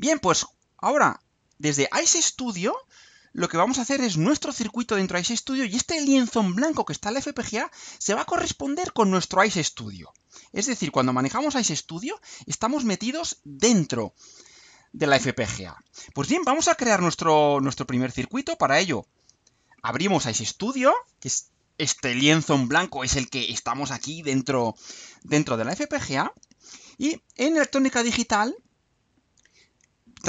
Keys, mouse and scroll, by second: 0.1 click, 19.1 click.